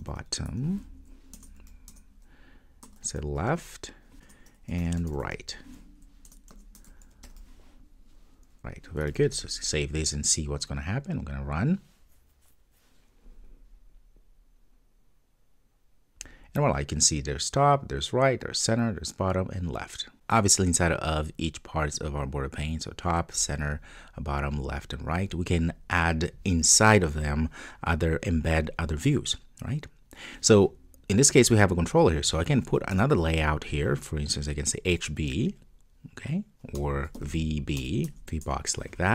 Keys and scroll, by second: 4.2 Return, 6.3 Return, 7.2 Return, 9.1 super+s, 10.3 super+F2, 13.4 ctrl+d, 38.2 Return.